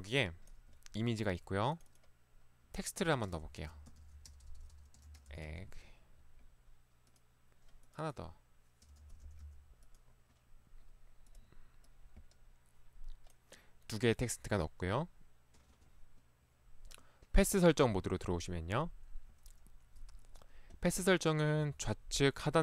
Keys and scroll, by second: 3.4-5.5 typing, 9.1-9.5 typing, 21.6 ctrl+1.